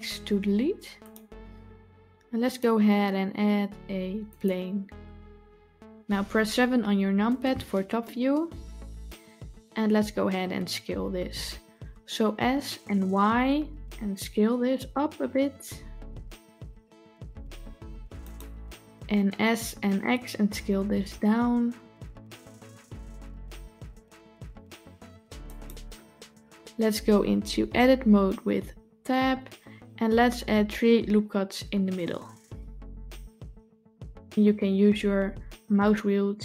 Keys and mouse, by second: 2.4-4.3 drag, 7.0 KP_7, 12.2 s, 19.4 s, 28.9 Tab, 32.7 ctrl+r.